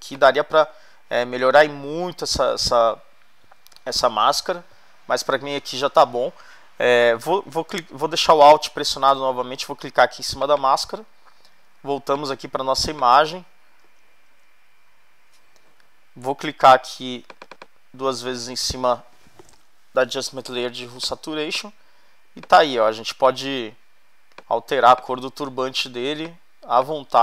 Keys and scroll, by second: 0.2 space, 11.7 alt+space, 13.8 super+-.